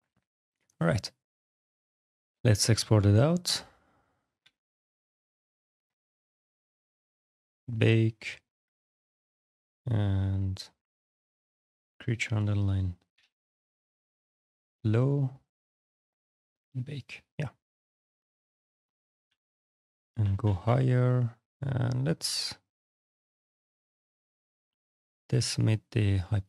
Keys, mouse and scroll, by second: 0.1 click, 1.5 alt+x, 1.5 click, 2.8 click, 4.2-7.0 typing, 7.8 click, 8.4 click, 8.5 click, 8.6 click, 10.0 click, 10.7 click, 11.4 click, 13.0 l, 13.0 o, 13.6 w, 15.7 click, 16.7 click, 19.1 d, 20.2 d, 21.7 click, 23.3 click, 26.3 click.